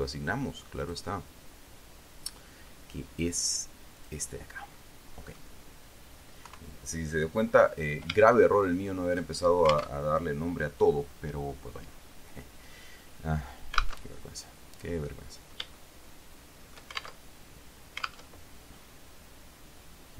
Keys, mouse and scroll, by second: 0.2 click, 1.1 click, 4.3 click, 5.1 middle click, 6.8 KP_3, 7.9-8.2 scroll up 2, 8.7 shift+middle click, 8.8 shift+scroll up 2, 10.2 alt+Tab, 14.3 alt+Tab, 16.1-17.3 shift+middle drag, 17.6 alt+shift+Tab, 18.7 alt+Tab.